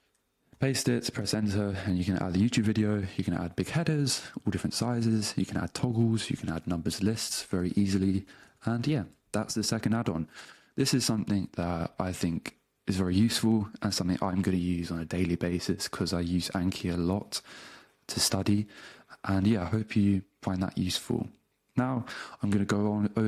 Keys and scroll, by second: 0.6 super+v, 1.2 Return, 6.8 ., 7.6 space, 8.2 s, 8.4 Return.